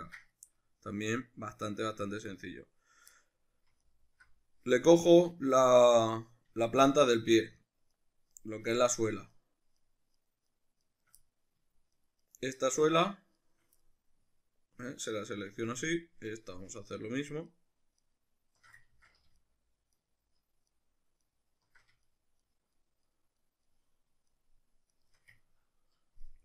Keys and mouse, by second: 3.8 alt+right click, 5.6-6.7 middle drag, 6.7 shift+right click, 7.2 shift+right click, 7.6 shift+right click, 8.0 shift+right click, 8.3 shift+right click, 8.7 shift+right click, 9.4 shift+right click, 9.8 shift+right click, 10.2 shift+right click, 10.5 shift+right click, 10.8 shift+right click, 11.2 middle click, 12.0 shift+right click, 12.2 shift+right click, 12.7 shift+right click, 13.1 shift+right click, 13.4 shift+right drag, 13.8-16.9 middle drag, 16.9 alt+shift+right click, 17.5 alt+shift+right click, 18.0 alt+shift+right click, 18.9 ctrl+z, 19.4 alt+shift+right click, 20.0-20.8 alt+shift+right drag, 21.2 alt+shift+right click, 22.0 shift+right click, 22.4 shift+right click, 22.7 shift+right click, 23.1 shift+right click, 23.4 shift+right click, 23.7 shift+right click, 24.3 shift+right click, 24.9 shift+right click, 25.4-26.4 ctrl+middle drag.